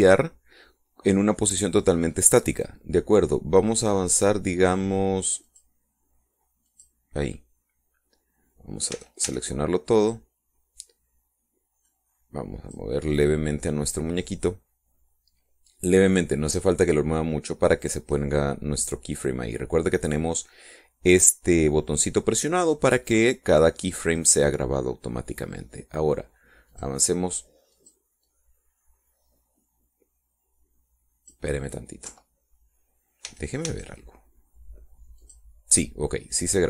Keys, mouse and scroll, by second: 6.3 click, 7.6 click, 9.8 a, 12.7-13.8 drag, 25.1 right click, 27.6 click, 28.7 click, 29.2-32.4 drag, 33.0 Left, 34.1 a, 36.1 click.